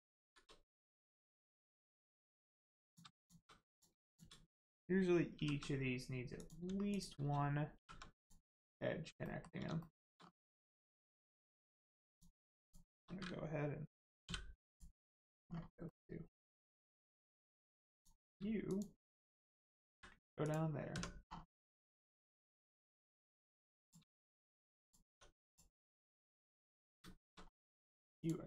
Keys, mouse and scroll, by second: 0.2 shift+r, 1.2 shift+middle click, 2.8 middle click, 3.1 shift+click, 3.6 click, 4.0 shift+click, 5.3 shift+r, 6.3 click, 6.8 shift+click, 7.7 shift+r, 8.2 click, 8.4-9.0 scroll down 1, 9.2 shift+middle click, 10.2 scroll up 1, 10.8 shift+middle click, 12.0 middle click, 12.6 shift+click, 14.6 click, 15.0-15.8 scroll down 1, 15.8 middle click, 16.9-17.6 scroll up 1, 17.9 click, 18.6 shift+click, 19.9 click, 20.3 click, 21.2 scroll down 1, 21.5 middle click, 23.2 scroll up 1, 23.5 middle click, 23.8 click, 24.0 shift+middle click, 24.4 middle click, 24.5 middle click, 24.8 click, 25.0 Tab, 25.4 click, 26.0 middle click, 27.1 shift+middle click, 27.3 scroll up 1, 28.1 click.